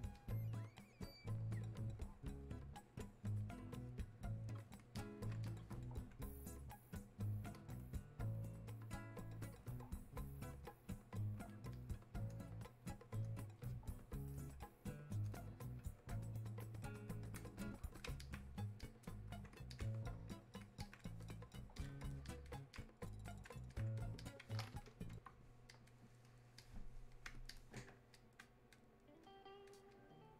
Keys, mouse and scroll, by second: 6.6-17.6 drag, 18.2 alt+click, 18.8-27.9 drag, 28.2-30.3 drag.